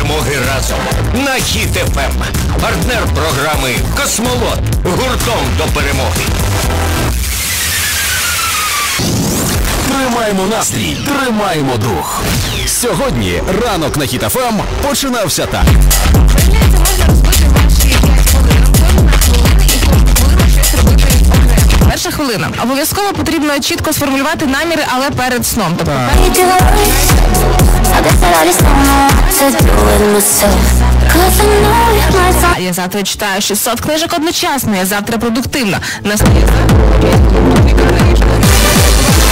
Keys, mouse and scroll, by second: 21.9 Page_Down, 32.7 Page_Down.